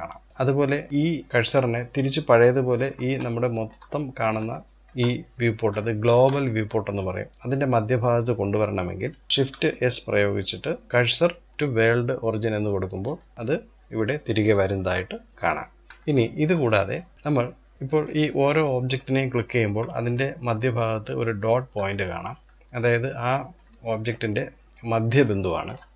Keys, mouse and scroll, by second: 2.9-9.3 shift+middle drag, 9.3 shift+s, 14.5-17.5 shift+middle drag, 17.5 click, 18.1 click, 18.7-19.7 middle drag, 19.7 shift+click, 21.0 shift+click, 21.5-22.3 middle drag, 22.3-22.8 scroll up 1, 22.8-23.2 scroll down 1, 23.2-25.9 middle drag.